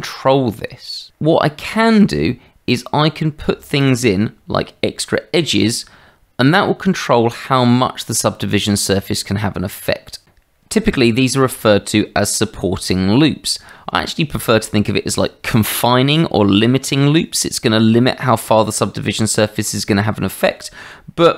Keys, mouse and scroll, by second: 10.2 Tab.